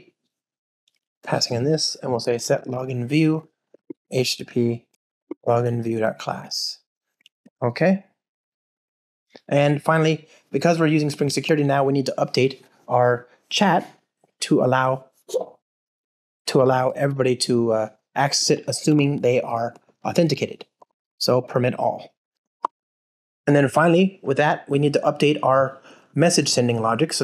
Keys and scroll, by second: 3.3 Return, 6.4 alt+super+l, 11.4 super+c, 21.4 Return, 22.5 Return, 23.7 ctrl+alt+shift+r.